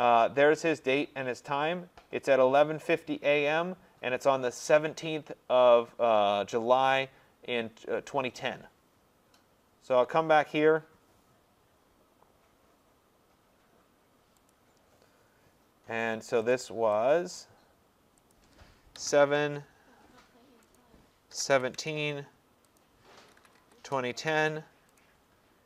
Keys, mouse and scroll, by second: 14.5 click, 16.5 click, 17.4 click, 18.3 click, 19.0 7, 19.3 Tab, 20.7 click, 21.1-22.0 typing, 22.8 click, 23.1-24.3 typing, 25.0 click.